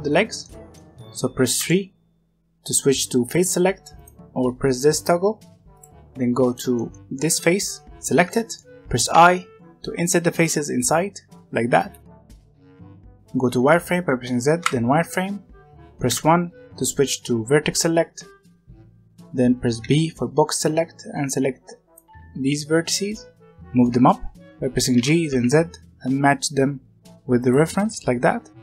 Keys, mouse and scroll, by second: 0.4-1.5 middle drag, 1.5 3, 3.9 click, 5.6 click, 6.2 scroll up 1, 6.4-8.7 middle drag, 8.7 scroll down 2, 8.8 right click, 9.3-12.0 right drag, 12.1 scroll down 1, 12.2 middle click, 12.3 scroll up 1, 12.4-13.5 middle drag, 13.5 z, 16.0 1, 19.7 b, 24.9 g, 27.9 r.